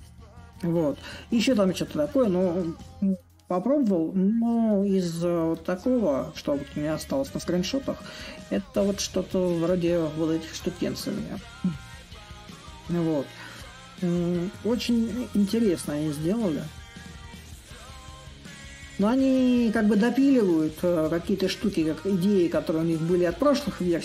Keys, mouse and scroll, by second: 5.0-10.8 drag, 11.6-16.7 drag, 17.6 s, 19.0-24.0 right drag.